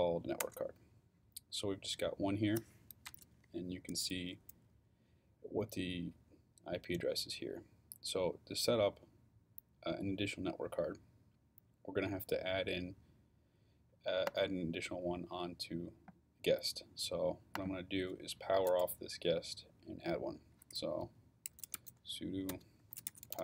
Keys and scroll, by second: 0.4 Return, 21.2-23.4 typing.